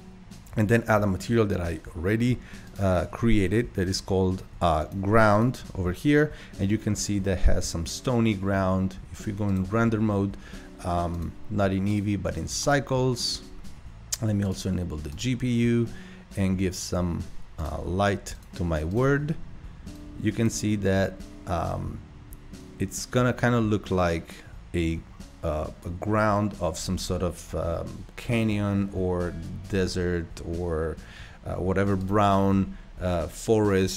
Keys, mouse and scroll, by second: 2.7 click, 4.8-9.6 drag, 11.1 click, 11.9-20.9 drag, 32.0 click.